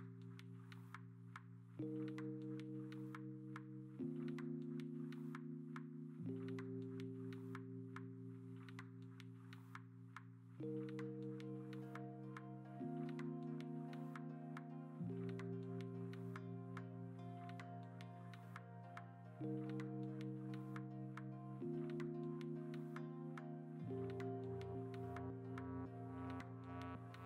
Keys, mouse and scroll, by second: 0.0 ctrl+alt+g, 0.4 ctrl+alt+g, 7.5-9.8 typing, 12.3 ctrl+t, 12.4 Escape, 12.6 v, 15.0 b, 24.7 b.